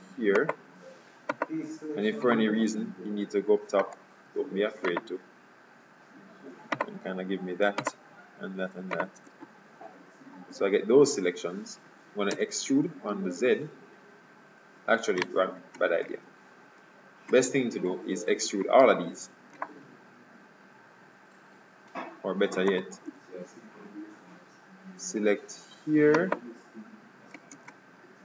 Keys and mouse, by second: 3.1 middle click, 5.0-6.5 right drag, 6.9-10.1 right drag, 10.1 KP_3, 10.2 click, 12.4 e, 16.1 ctrl+z, 19.7-21.6 middle drag, 22.8-24.7 right drag, 23.2 KP_3, 26.2-27.9 right drag, 27.6 ctrl+Tab.